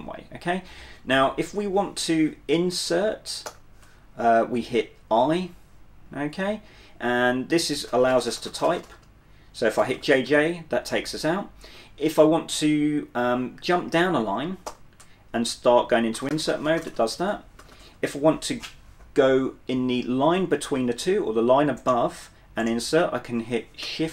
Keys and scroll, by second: 1.0-2.4 typing, 3.6 i, 5.9 typing, 8.0-10.1 typing, 14.8 o, 16.0-17.8 typing, 23.9 typing.